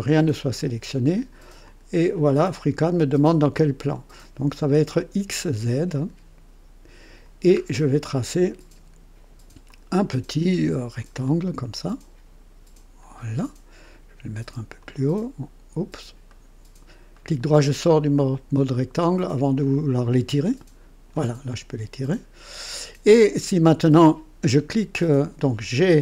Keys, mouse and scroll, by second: 1.6 click, 5.9 click, 7.5-8.0 scroll up 1, 8.1-8.7 right drag, 9.6 click, 11.2 click, 13.0 click, 14.8 click, 16.3 right click, 17.1 right click, 17.8 click, 19.6-21.3 drag, 22.1 click, 23.3 click.